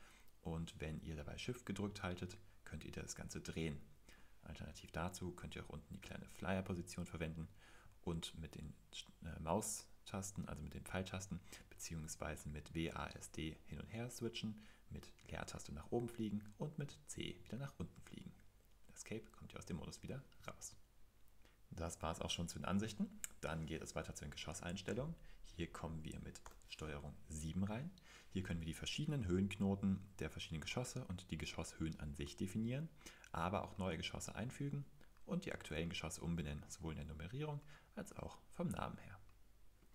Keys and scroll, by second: 7.4 typing, 11.1-12.6 typing, 15.2 typing, 16.9-17.4 typing, 20.5 super+2, 26.4 super+7.